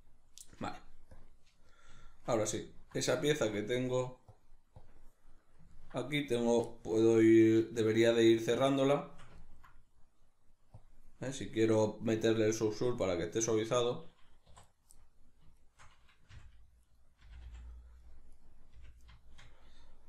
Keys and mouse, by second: 1.2 click, 1.7-4.3 middle drag, 4.3-5.4 drag, 5.4-10.8 middle drag, 10.8 click, 11.4-13.7 middle drag, 13.7 right click, 14.4 2, 14.6 right click, 15.0 middle click, 15.6 shift+right click, 16.3 f, 16.8 right click, 17.2 f, 17.8 middle click, 18.3 right click, 18.7 f, 19.2-20.0 shift+middle drag.